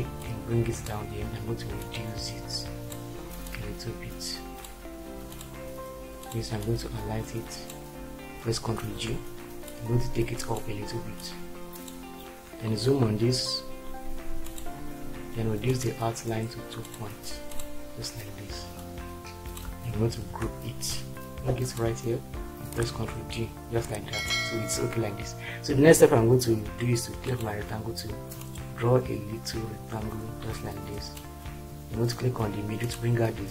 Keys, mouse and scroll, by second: 8.9 ctrl+g, 20.2 ctrl+g, 22.8 ctrl+d.